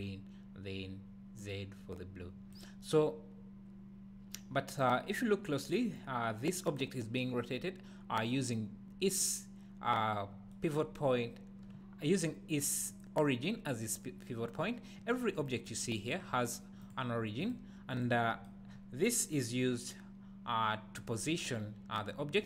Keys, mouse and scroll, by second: 2.9-4.1 scroll down 1, 14.6 scroll down 1, 16.2 scroll down 1, 16.8 click, 17.4 click, 17.9 click, 18.7 scroll up 1.